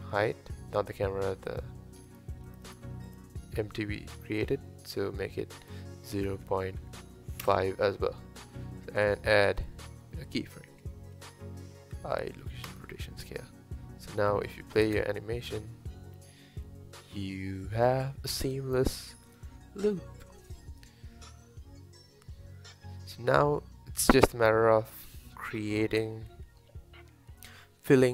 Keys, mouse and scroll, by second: 1.5 click, 2.1 click, 2.5 click, 2.7 click, 3.1 click, 5.7-8.6 drag, 14.3-14.9 drag, 14.9 space.